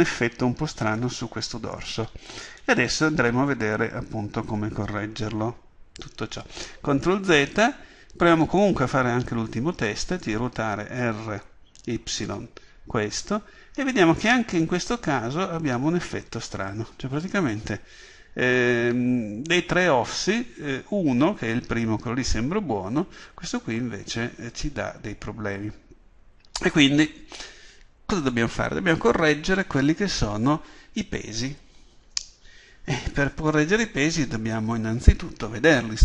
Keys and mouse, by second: 6.6 ctrl+z, 8.5-10.1 drag, 10.1 right click, 26.8-36.0 drag.